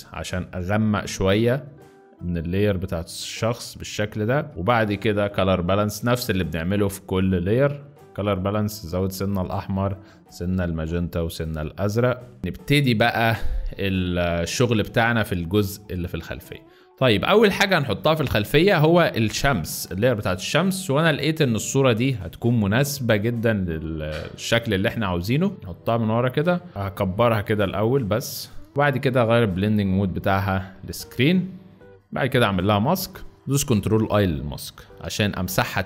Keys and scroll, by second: 12.4 z, 15.0 space, 15.5 space, 16.4 z, 35.0 b.